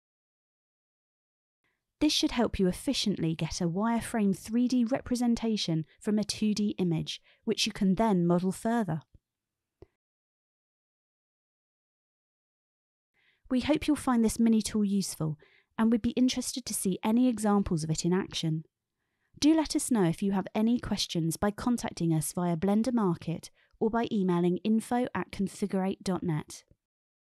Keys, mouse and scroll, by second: 1.2-3.8 typing, 2.2 click, 3.3 click, 4.6 click, 5.5 e, 5.7 shift+z, 6.2 click, 6.5 shift+middle click, 6.9 g, 7.2 click, 7.4 alt+y, 7.7 click, 8.0 shift+middle click, 8.4 alt+y, 9.1 click, 9.4 e, 10.1 alt+y, 11.0 shift+middle click, 11.8 shift+middle click, 13.1 alt+y, 13.5 click, 13.6 Tab, 14.5 shift+middle click, 14.7 Tab, 14.8 click, 15.2 shift+d, 16.2 e, 16.9 e, 17.2 click, 17.9 click, 18.4 alt+y, 19.7 click, 20.2 alt+y, 21.1 click, 21.7 alt+y, 22.6 click, 23.3 click, 23.7 alt+y, 24.4-26.3 middle drag.